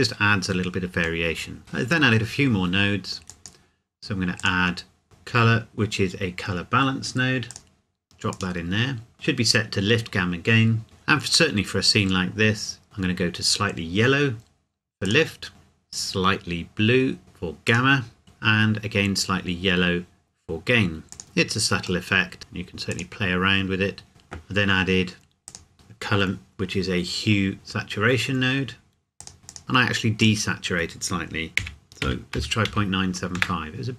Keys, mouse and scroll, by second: 1.2 middle click, 3.3 click, 7.5 click, 11.6-12.4 scroll up 1, 15.0 click, 18.0 click, 21.1 click, 21.2-22.0 scroll up 1, 22.0 middle click, 22.4-22.9 scroll up 1, 22.9 click, 29.2 click, 30.4 click, 31.6 KP_Decimal, 32.0 KP_9, 32.3 KP_7, 32.6 KP_5, 33.4 KP_Enter.